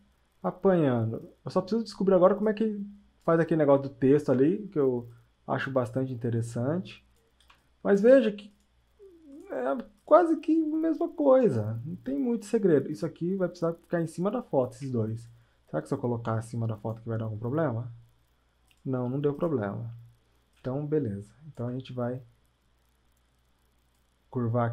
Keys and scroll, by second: 7.5 space.